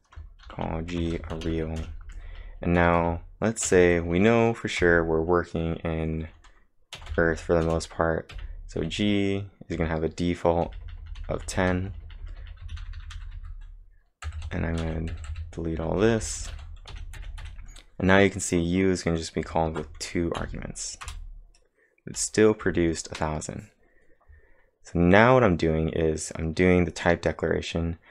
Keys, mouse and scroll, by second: 0.0-3.7 typing, 4.8 =, 6.9-8.1 typing, 10.8-13.4 typing, 16.4 space, 19.7 ctrl+`, 20.4 Up, 21.1 Return.